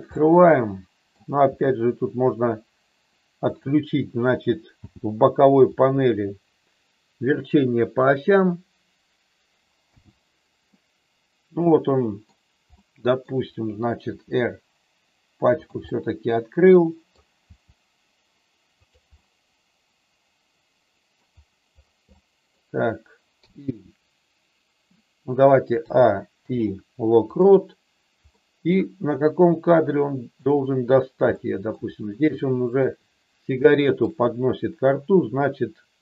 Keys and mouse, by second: 0.1 middle click, 1.4 r, 3.4 click, 4.7 n, 9.9 n, 10.7-12.3 middle drag, 12.7 middle click, 14.1 r, 15.6 click, 15.8-17.1 middle drag, 17.4 r, 18.8 click, 19.2-21.2 middle drag, 22.1 middle click, 23.3 i, 25.8 a, 26.3 i, 28.3 middle click, 29.6 click, 31.3 middle click, 32.3 shift+middle click, 33.7 shift+middle click.